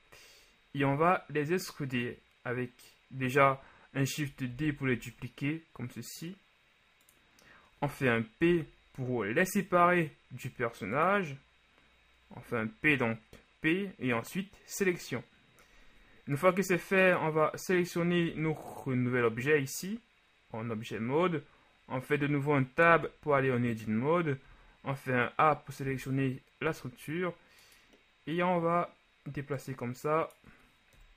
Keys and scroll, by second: 4.6 shift+d, 4.9 shift+z, 8.6 p, 23.0 Tab, 24.5 a.